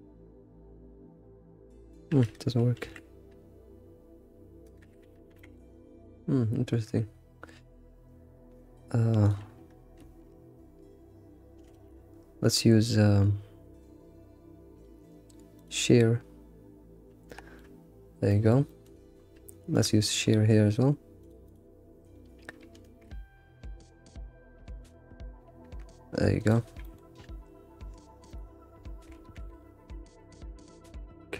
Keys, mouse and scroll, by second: 2.8 alt+r, 5.3 g, 11.7 ctrl+alt+shift+s, 17.3 shift+middle click, 17.8 scroll down 4, 18.3 shift+middle click, 19.2-19.7 scroll up 1, 19.7 alt+click, 20.3 scroll up 2, 21.2 click, 21.5 alt+click, 22.5 alt+Left, 22.8 ctrl+alt+shift+s, 26.8 g, 29.1 ctrl+s.